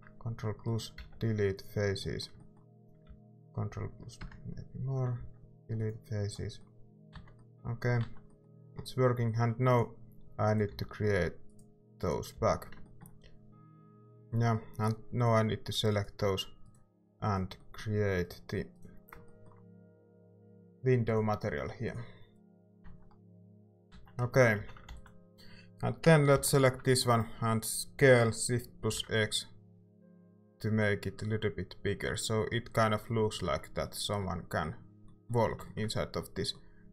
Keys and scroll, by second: 0.9 ctrl+x, 3.1 ctrl+z, 5.1 x, 7.1 Tab, 8.0 Tab, 10.7 f, 12.3 f, 13.7 a, 22.8 Tab, 23.9 Tab, 24.5 a, 24.8 ctrl+s, 26.3 i, 28.0-29.4 typing.